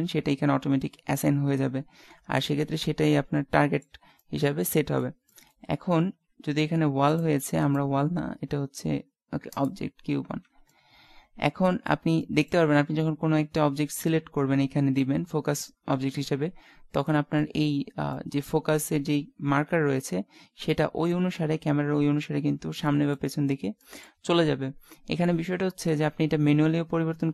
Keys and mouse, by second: 2.5 middle click, 3.6 middle click, 3.7 middle click, 4.2 middle click, 5.3 middle click, 6.1 z, 10.4 z, 10.8 middle click, 12.3 middle click, 12.5 middle click, 17.1 middle click, 18.3 middle click.